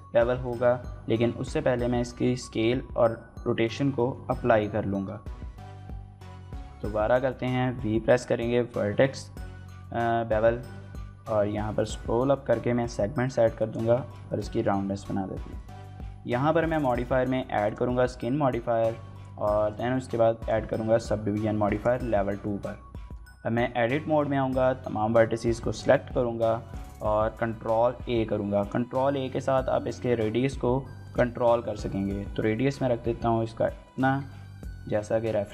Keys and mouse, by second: 0.2 right click, 1.1 Tab, 1.5 ctrl+a, 3.9 Tab, 4.7 ctrl+b, 6.3 v, 13.3 click, 13.6 Tab, 14.1 shift+middle click, 14.3 middle click, 15.4-17.6 drag, 19.4-20.3 drag, 21.6 click, 22.4 Tab, 22.8 click, 24.1 a, 25.2 z, 26.2 z, 27.3 ctrl+a, 28.4 click, 28.9 shift+middle click, 29.3 ctrl+a, 30.8 click, 31.1 shift+middle click, 31.3 middle click, 33.7 click, 34.1 shift+middle click, 34.3 middle click, 35.2 shift+middle click, 35.4 middle click.